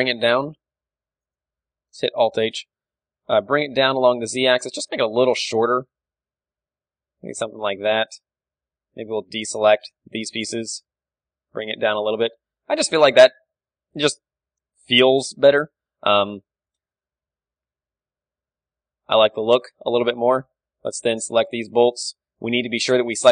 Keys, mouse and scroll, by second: 1.8-4.3 right drag, 2.9 alt+h, 4.4-6.3 drag, 4.5 z, 5.6 g, 6.3 middle click, 7.6-10.0 drag, 7.7 z, 7.9 b, 10.2 z, 10.8 g, 11.9-14.2 drag, 12.0 Tab, 13.4 KP_1, 14.2-16.3 middle drag, 14.7 Tab, 15.0 z, 15.1 a, 15.8 b, 17.6 ctrl+l, 18.7 z, 19.0 g, 20.3 click, 20.5 Tab, 21.1-22.1 middle drag, 21.4 z, 22.1 right click, 22.7 alt+h.